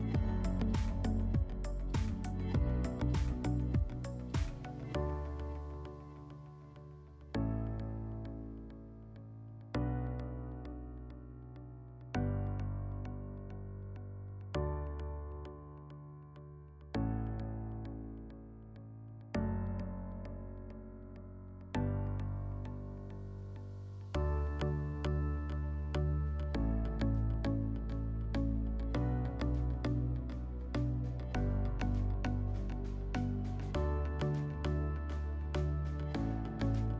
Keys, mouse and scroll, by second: 6.2 click, 7.6 click, 7.8 click, 8.4-10.5 typing, 10.1 click, 11.4 click, 16.8 click, 17.9 click, 19.0 click, 19.7-21.2 drag, 21.6-22.7 drag, 25.3 click, 26.3 click, 26.4 w, 26.5 click, 26.9 click, 29.0-30.6 drag, 32.4-33.9 middle drag, 34.0-34.8 drag, 35.4 click, 36.0 click.